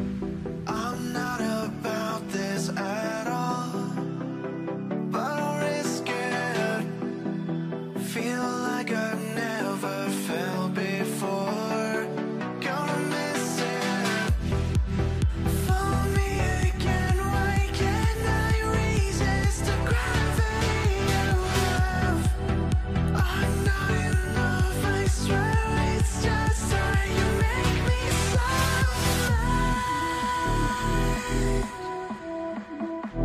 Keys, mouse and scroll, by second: 3.5 w, 5.7 l, 6.0 z, 6.4-6.8 scroll up 1, 7.3 scroll, 8.5 a, 9.7 w, 11.7 right click, 12.5 scroll down 1, 12.7 alt+middle click, 19.5 right click, 20.7 double click, 26.4 double click, 26.8 middle click, 27.4 alt+middle click, 28.4 ctrl+click, 28.7 alt+q, 29.5 double click, 29.8 t, 30.2 scroll down 1, 30.4 w, 32.4 right click.